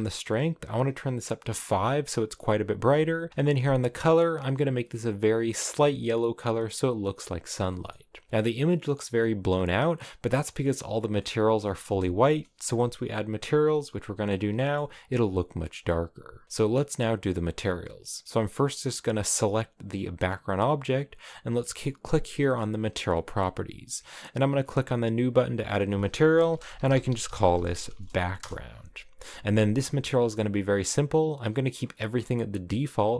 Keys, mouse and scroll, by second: 1.6 click, 4.6 click, 7.8 shift+middle click, 8.0-8.9 scroll up 4, 8.9 scroll up 1, 9.1-9.6 scroll down 4, 9.9 middle click, 10.9 scroll, 10.9-11.3 scroll down 3, 11.3 middle click, 12.2 KP_0, 13.1-14.4 scroll up 1, 14.4 scroll up 1, 14.5-18.4 shift+middle drag, 18.4 right click, 19.3 g, 24.6-30.4 drag.